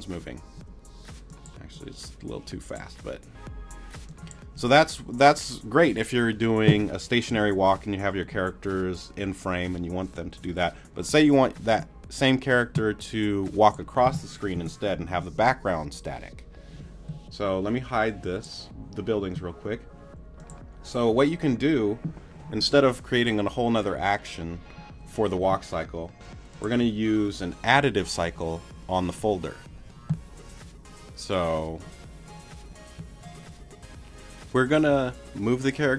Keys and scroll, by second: 0.6 space, 14.5 BackSpace.